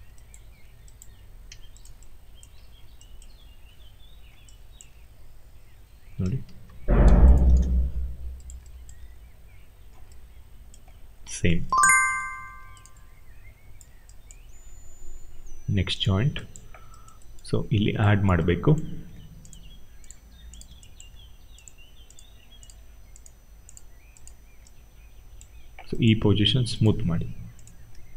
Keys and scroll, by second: 1.4 q, 2.4 e, 6.1 ctrl+a, 7.3 0, 7.4 Return.